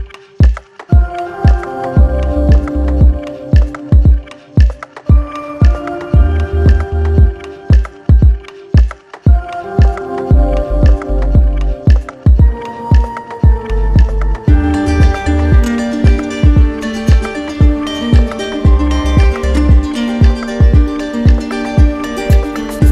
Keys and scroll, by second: 12.2 ctrl+alt+z, 22.3 ctrl+alt+z.